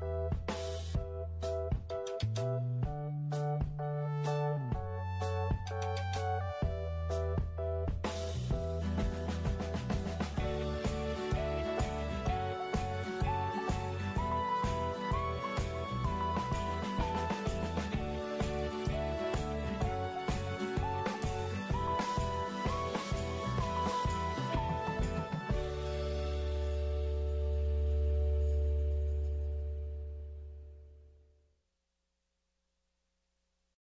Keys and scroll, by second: 4.6-5.5 typing, 7.2-8.0 typing, 29.2 f.